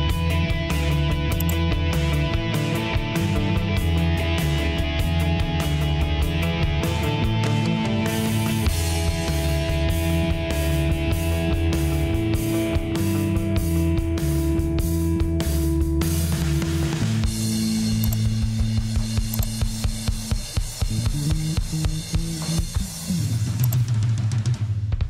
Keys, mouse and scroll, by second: 3.3 F9.